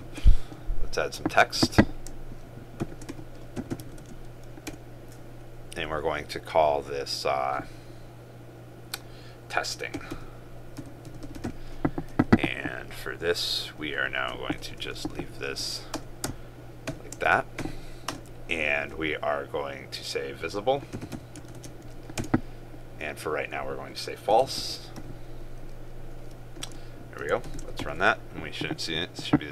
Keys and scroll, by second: 4.1 ctrl+space, 21.6 ctrl+space, 27.4 ctrl+s, 28.0 ctrl+r.